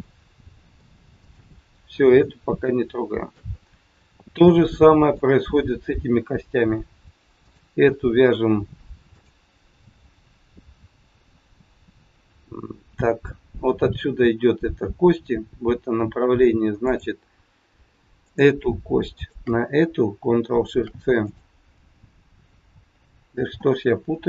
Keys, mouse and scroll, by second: 0.5 ctrl+shift+c, 2.7 shift+middle click, 3.5 middle click, 7.3 click, 9.1 shift+click, 16.7 click, 18.1 click, 19.1 shift+click, 19.2 shift+click, 20.6 ctrl+shift+c, 23.2 ctrl+x.